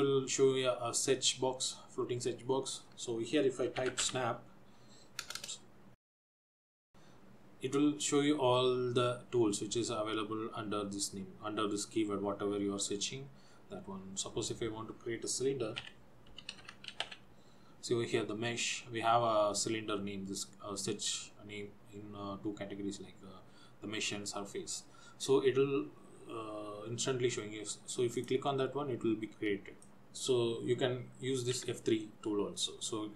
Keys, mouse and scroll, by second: 5.5 BackSpace, 29.9 click.